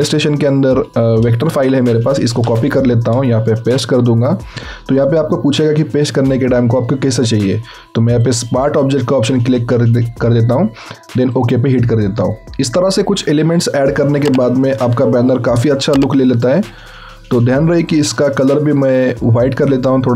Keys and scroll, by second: 1.5 ctrl+c, 3.5 v.